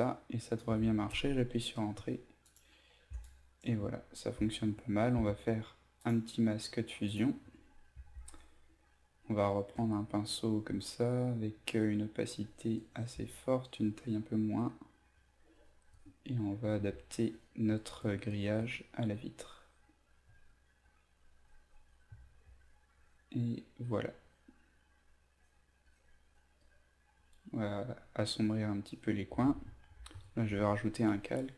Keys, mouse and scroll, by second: 2.4 click, 6.0 click, 7.9 b, 9.1 right click, 9.7 click, 13.2 alt+right click, 14.4-19.4 drag, 20.2 click, 22.1 typing, 22.6 click, 30.1 ctrl+alt+shift+n, 31.1 b.